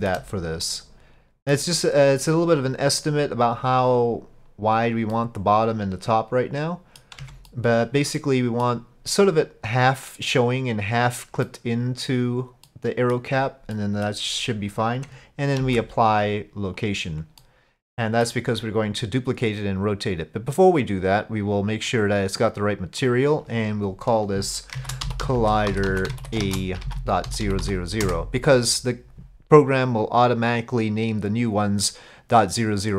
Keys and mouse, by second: 0.7 middle click, 5.2-7.1 middle drag, 7.2 Tab, 7.5-8.7 middle drag, 11.5-12.1 middle drag, 12.7-13.2 middle drag, 13.7-14.1 middle drag, 15.6 ctrl+a, 17.4-18.6 middle drag, 21.3 click, 23.1-29.5 drag, 25.4 l, 27.5 0.